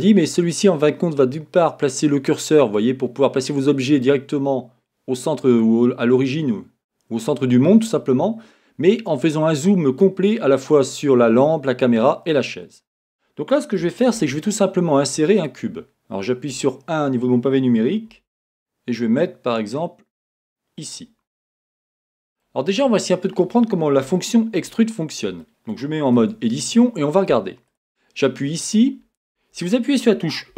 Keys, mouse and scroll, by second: 12.8 scroll up 1, 14.1 shift+a, 16.5 KP_1, 18.1 g, 20.9 click, 21.3-27.7 middle drag, 22.7 scroll up 1, 26.2 Tab, 27.7 click.